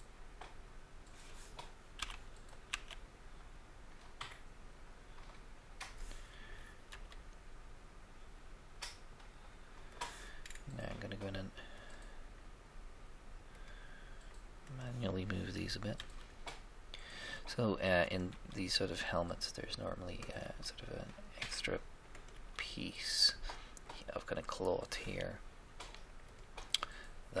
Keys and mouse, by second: 2.0 s, 2.6 z, 6.8 g, 7.0 g, 10.4 middle click, 11.8-13.4 drag, 15.9 g, 16.1 g, 18.2 g, 18.4 g, 20.4 g, 20.6 g, 22.3 g, 22.5 g, 26.2-27.4 drag.